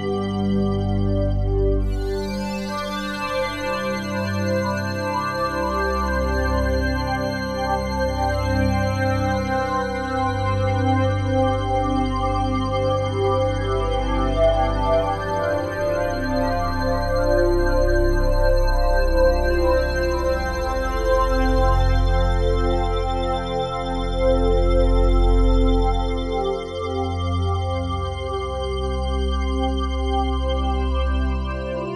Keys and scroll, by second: 8.5 F3, 31.1 F4.